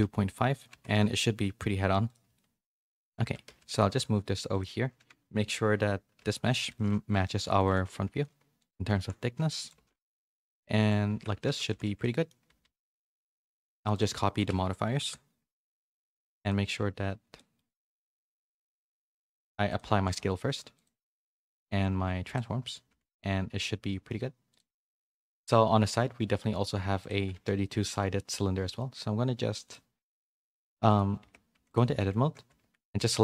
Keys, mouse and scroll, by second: 1.4 a, 2.0 click, 2.3 middle click, 3.2 Tab, 3.4 a, 3.8 g, 5.3 KP_1, 6.1 z, 6.6 s, 7.7 g, 8.7 s, 9.7 g, 11.1 Tab, 11.4 z, 11.7 a, 12.0 middle click, 12.0 a, 12.6 a, 12.8 click, 13.9 shift+click, 14.8 ctrl+l, 15.8 middle click, 17.3 middle click, 18.3 click, 19.9 ctrl+a, 22.9 a, 23.0 a, 23.1 middle click, 25.3 click, 27.0 click, 27.3 shift+a, 29.6 click, 30.1 shift+s, 31.2 Tab, 31.5 3, 32.4 a, 32.8 middle click.